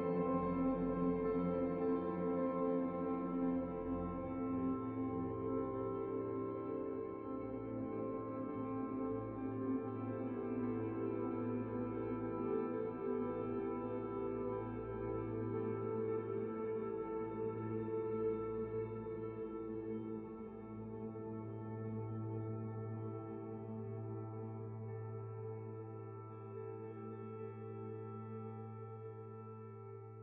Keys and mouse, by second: 0.1-1.4 middle drag, 0.1-1.4 right drag, 0.6 f, 2.3-3.5 middle drag, 2.3-3.5 right drag, 3.8 f, 4.1 click, 4.1 middle click, 4.2 f, 4.7 f, 5.3 f, 5.5-8.5 drag, 6.9-8.5 right drag, 7.1 f, 7.7 f, 8.6-11.0 middle drag, 9.6 f, 9.7-18.3 drag, 9.7-11.0 right drag, 10.1 f, 11.4-15.1 middle drag, 11.6-15.2 right drag, 11.6 f, 12.6 f, 13.8 f, 14.3 f, 15.4 f, 15.7 f, 16.4 f, 17.1 f, 18.0-19.4 middle drag, 18.0 right click, 18.5-21.2 typing, 18.7-28.8 drag, 22.8 middle click, 23.4-25.9 middle drag, 23.6 f, 24.1 f, 24.8-25.9 right drag, 24.8 f, 25.2 ctrl+d, 25.9 ctrl+s, 26.3 f, 26.5-27.8 middle drag, 26.5 right click, 27.5 f, 27.6 f, 27.9 f, 28.6 right click, 28.7 ctrl+z, 28.8 f, 28.8 middle click, 29.0-30.1 drag, 29.0 right click.